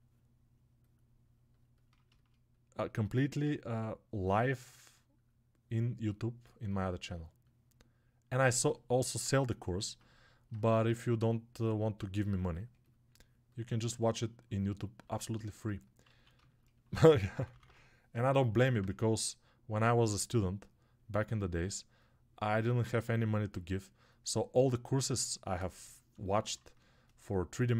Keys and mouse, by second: 15.1-27.7 alt+shift+drag.